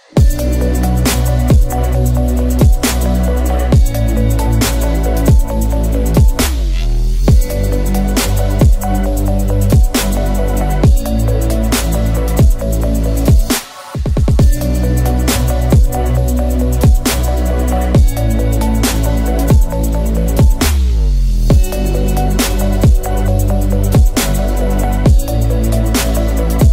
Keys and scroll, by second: 3.8 ctrl+z, 5.2 2, 13.7 ctrl+d, 23.0 ctrl+z, 25.7 ctrl+z.